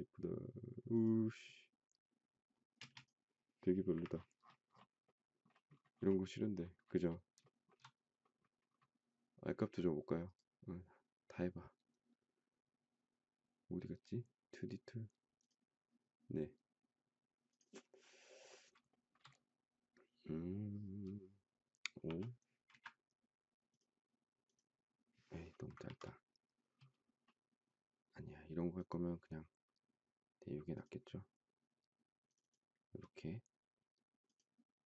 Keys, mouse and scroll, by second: 2.8 space, 3.9 Delete, 7.4 shift+middle click, 18.9 shift+middle click, 21.9 5, 22.7 Return, 25.8 ctrl+z.